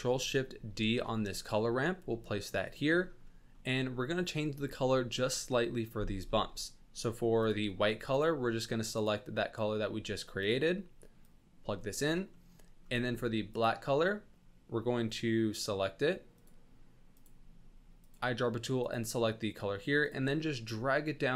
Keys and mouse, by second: 1.0 ctrl+shift+d, 3.3 click, 7.3-7.7 drag, 11.3-12.3 drag, 13.5 click, 16.3 click.